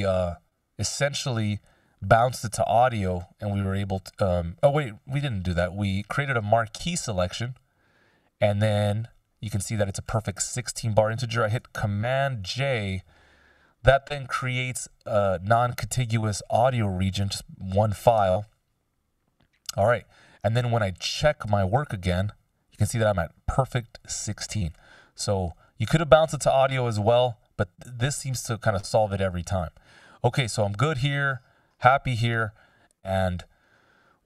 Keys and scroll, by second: 0.1 F16, 5.3 F16, 12.1 super+j, 18.3 Return.